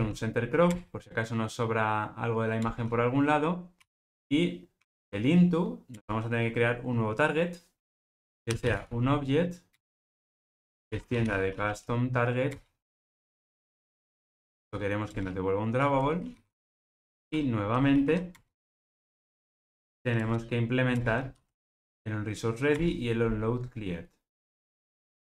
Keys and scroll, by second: 0.7 Return, 5.9 Return, 9.7 Return, 20.2 alt+Return.